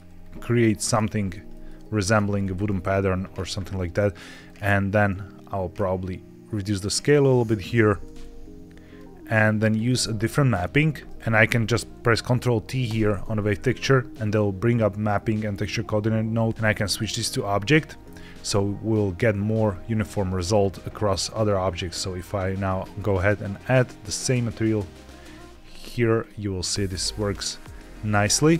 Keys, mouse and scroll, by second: 0.1-0.4 scroll up 2, 0.6 shift+middle click, 1.4 shift+middle click, 1.8 scroll up 1, 2.3 shift+middle click, 2.6-4.3 scroll down 2, 4.3-7.5 shift+drag, 8.9 click, 9.9-10.7 scroll down 3, 11.0 ctrl+z, 11.3 click, 12.8 ctrl+t, 13.6-14.3 scroll up 2, 16.8 click, 19.5-19.8 scroll down 2, 20.4 click, 21.3 click, 23.3 click, 24.1 click, 24.9 click, 26.1 click, 26.8-27.3 scroll up 1, 27.5 shift+middle click.